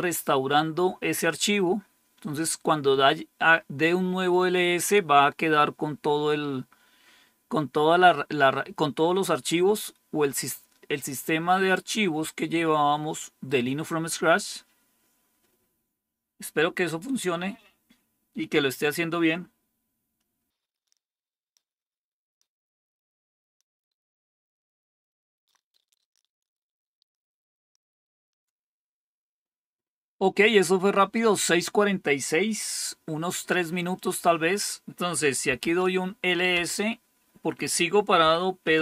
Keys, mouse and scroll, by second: 33.9 click, 35.1-36.0 typing, 36.5 Return, 37.9-38.8 typing.